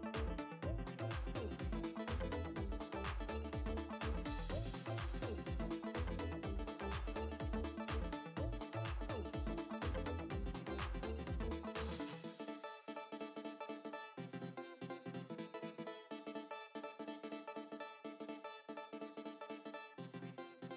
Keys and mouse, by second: 3.7 ctrl+z, 5.2 space, 5.5 click, 8.3 click, 11.4 ctrl+z, 14.6 alt+click.